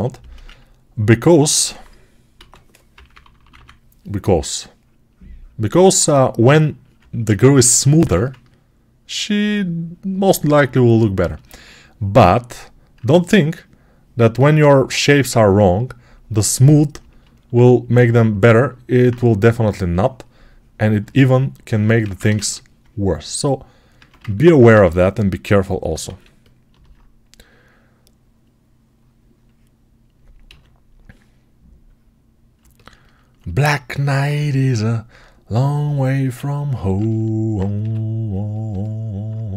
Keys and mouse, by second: 0.9-23.8 alt+drag, 2.2 x, 2.8 [, 3.0 [, 7.9 1, 21.9 ctrl+Tab, 22.2 shift+a, 23.8-25.7 alt+right drag, 23.8 Tab, 25.0 s, 25.7-28.9 alt+middle drag, 25.9 alt+z, 28.9-32.4 right drag, 30.3 s, 32.4-35.7 alt+drag, 35.7-38.5 alt+right drag, 36.2 alt+z, 37.6 s, 38.5-39.5 alt+middle drag.